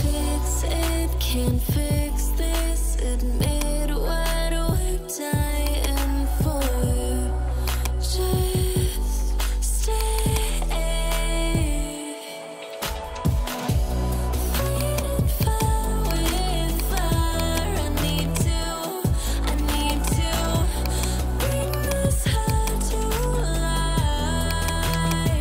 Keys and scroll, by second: 0.0-2.5 typing, 6.9 ctrl+j, 11.1-13.8 typing.